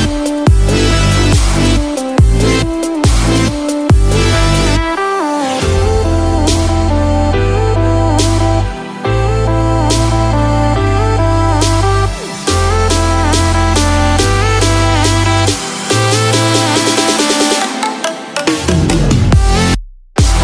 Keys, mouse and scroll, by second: 6.6 click, 12.1 click, 12.1 n, 13.8 click, 15.9 click, 15.9 n, 19.2 click, 19.2 n, 19.7-20.4 scroll down 2.